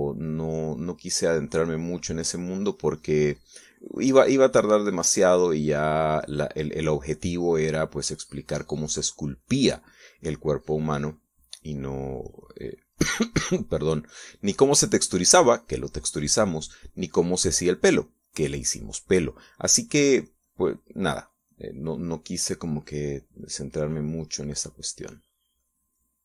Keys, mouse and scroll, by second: 3.5-14.8 drag.